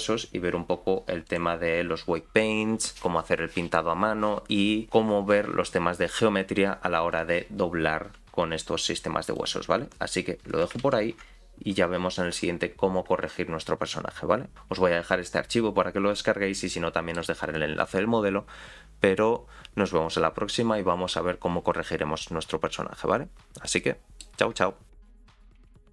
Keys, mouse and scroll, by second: 10.9 ctrl+z, 16.7 middle click, 23.8 middle click.